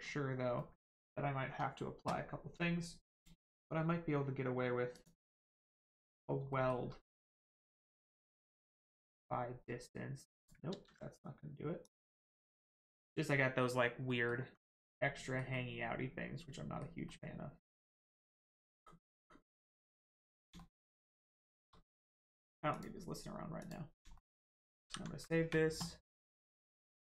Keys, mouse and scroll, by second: 0.0 scroll down 1, 0.6 middle click, 3.1 click, 5.7 middle click, 6.2 scroll up 1, 6.5 shift+middle click, 8.6 click, 10.7 ctrl+z, 11.8 click, 13.5-14.0 scroll down 1, 14.1 middle click, 14.5 scroll down 1, 14.7 middle click, 17.1 middle click, 18.5 scroll up 1, 18.8 middle click, 19.9 scroll down 1, 20.5 shift+middle click, 20.9 middle click, 21.5 shift+middle click, 22.7 click, 24.1 shift+middle click, 24.4 shift+middle click.